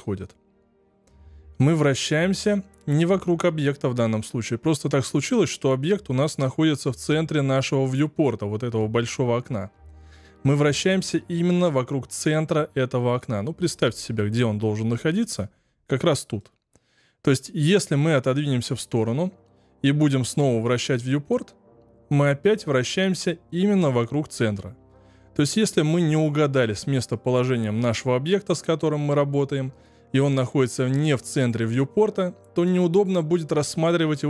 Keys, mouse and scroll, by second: 0.1-3.2 middle drag, 16.3-23.7 middle drag, 24.9-27.9 shift+middle drag, 33.1-34.2 middle drag.